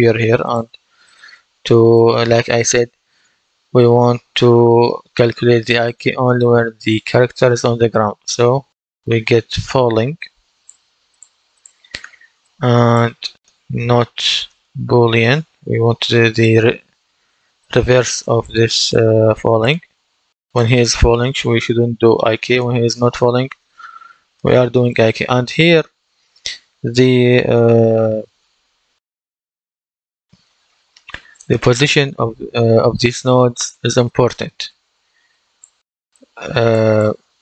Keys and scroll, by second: 13.4-14.8 typing.